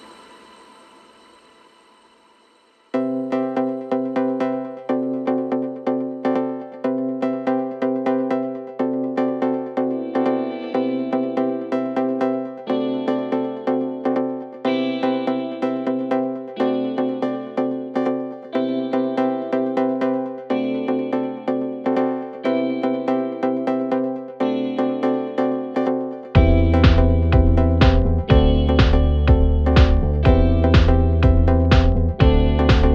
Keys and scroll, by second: 1.3 4, 2.1 3, 4.1 4, 6.3 shift+i, 7.7 ., 13.9 F1, 17.2 F9, 22.9 3, 23.7 Delete, 24.2 Delete, 27.7 3, 29.8 Delete, 30.8 F1.